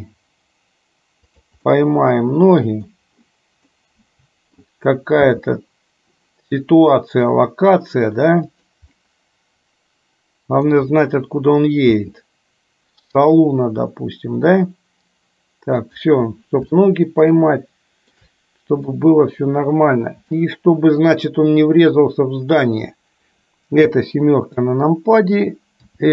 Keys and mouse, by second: 2.0-3.2 middle drag, 4.0-4.9 middle drag, 5.4 g, 9.1-11.0 middle drag, 11.9 g, 17.0-18.4 shift+middle drag, 19.0-21.3 middle drag, 24.0 KP_7, 25.9 r.